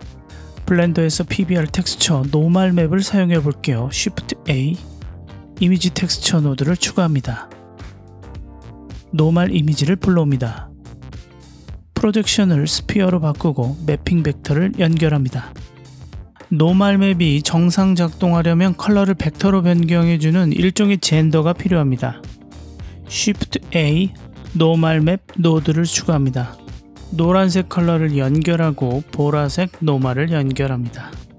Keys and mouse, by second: 2.4 click, 4.5 shift+a, 9.4 click, 12.1-13.3 drag, 15.0 click, 15.2-16.8 drag, 18.9 click, 22.6 shift+a, 26.6 click, 29.1 click, 29.3-30.0 drag.